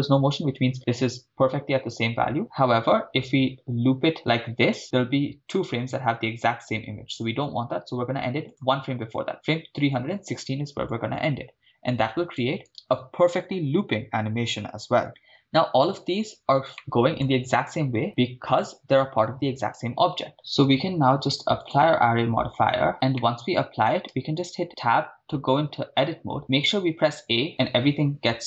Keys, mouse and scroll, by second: 0.3-2.6 scroll down 4, 8.5 click, 10.9-12.5 drag, 12.7 shift+space, 16.7-17.2 middle drag, 18.8-19.2 scroll down 3, 20.3 click, 23.3-24.0 middle drag, 24.6 Tab, 26.4 a, 26.5 a.